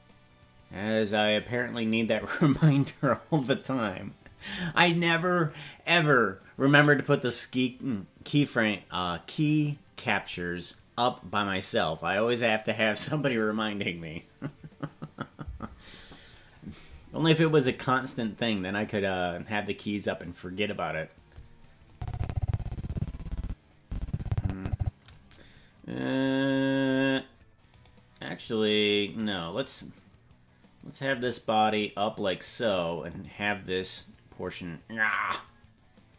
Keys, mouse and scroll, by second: 0.0-2.3 scroll up 3, 21.9-25.2 drag, 27.8 right click, 29.2-31.2 right drag, 31.2-32.7 drag, 33.2 right click, 33.9-36.1 drag.